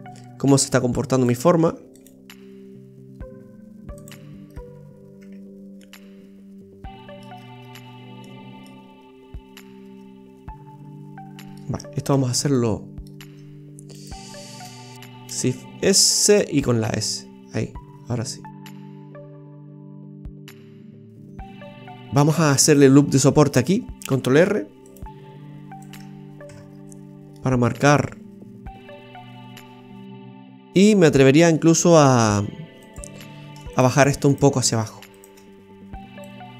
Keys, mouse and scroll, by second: 1.7 ctrl+r, 4.5-4.8 scroll down 1, 5.2 Tab, 5.8 middle click, 7.3-8.1 scroll down 4, 8.2 middle click, 12.1 Tab, 12.5 middle click, 14.0 right click, 15.0 ctrl+z, 15.4 shift+s, 16.6 s, 19.3 scroll down 1, 19.5 middle click, 22.7-24.0 scroll up 3, 24.0 scroll up 1, 24.4 ctrl+r, 26.5 Tab, 26.7-27.3 scroll down 4, 27.3 middle click, 30.0 Tab, 30.0 middle click, 30.5 middle click, 32.0 middle click, 32.8 right click, 33.8 alt+shift+right click, 34.0 alt+shift+right click, 34.3 alt+shift+right click, 35.1 alt+shift+right click, 36.3 click.